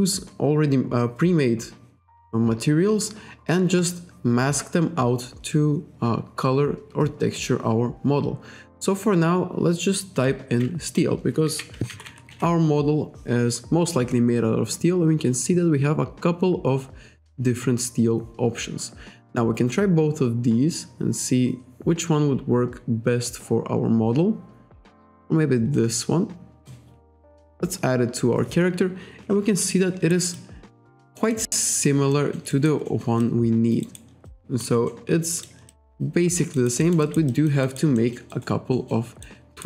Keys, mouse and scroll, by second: 3.3-4.0 scroll up 1, 11.0 click, 11.6 s, 11.8 t, 25.8 click, 29.7 alt+right click, 30.4 alt+click, 31.2 alt+middle click, 31.5 alt+right click, 32.1 alt+middle click, 32.5 alt+right click, 32.9 alt+middle click, 33.2 alt+click, 33.8 alt+right click, 34.3 alt+click, 34.9 alt+middle click, 35.7 alt+click, 36.5 alt+right click, 36.8 alt+middle click, 37.0 alt+right click, 38.0 alt+middle click, 38.7 alt+middle click, 39.2 alt+right click.